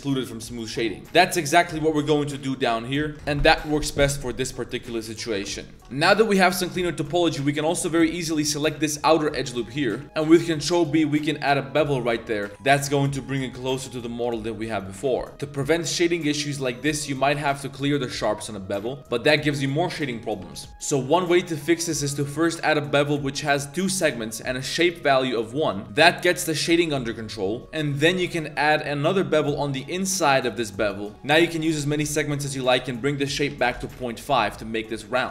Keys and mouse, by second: 0.0 Tab, 0.1-0.6 drag, 1.0 KP_Decimal, 1.0 2, 2.6 alt+shift+click, 3.1 ctrl+e, 3.1 Tab, 3.4-3.8 drag, 4.2 drag, 4.6 drag, 5.0 shift+drag, 5.6 Tab, 5.8-8.7 typing, 6.1 alt+click, 7.3 alt+click, 8.0 alt+shift+click, 13.6-14.4 drag, 14.8 click, 15.3 ctrl+z, 17.0 Tab, 17.3 ctrl+e, 20.6 ctrl+z, 24.8-25.8 drag, 25.8 Tab, 26.9 middle click, 27.6 2, 28.6 ctrl+b, 32.5-34.0 drag, 35.2 Tab.